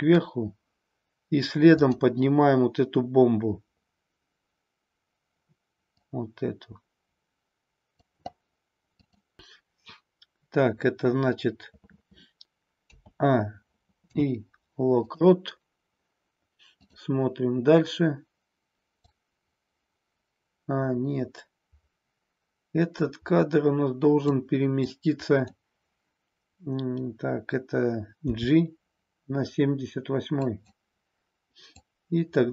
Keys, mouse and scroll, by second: 1.7-4.6 drag, 5.8-8.1 drag, 8.8 click, 12.8 a, 13.9 i, 16.8 click, 19.0-24.3 drag, 24.7-25.4 drag, 28.3 g, 30.5 click, 31.9-32.5 drag.